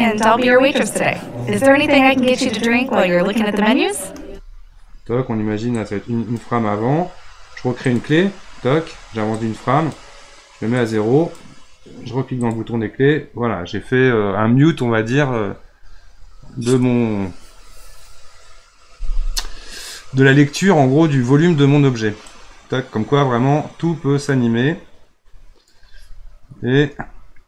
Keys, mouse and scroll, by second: 4.2 space, 5.8-7.9 drag, 9.4-12.5 drag, 22.3-25.4 drag, 26.8 space.